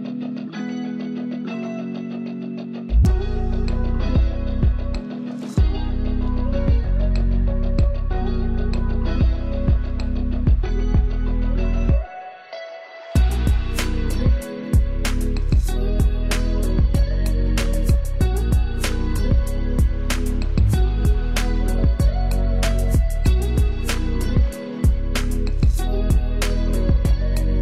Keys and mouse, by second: 8.1 ctrl+f, 12.0 ctrl+click, 13.6 ctrl+space, 14.0 ctrl+click, 14.2 ctrl+space, 15.5 ctrl+alt+click, 24.5 click, 26.9-27.6 typing.